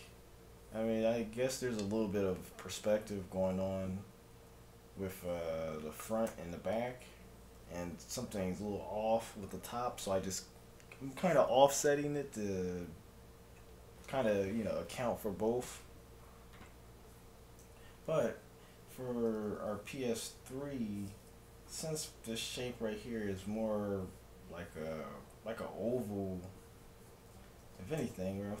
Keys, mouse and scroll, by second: 2.9 KP_1, 4.4 KP_3, 6.4 ctrl+KP_1, 7.8 KP_7, 16.9-19.4 middle drag, 19.4 KP_3, 20.6-22.6 middle drag, 27.4-28.6 middle drag, 28.0 shift+a.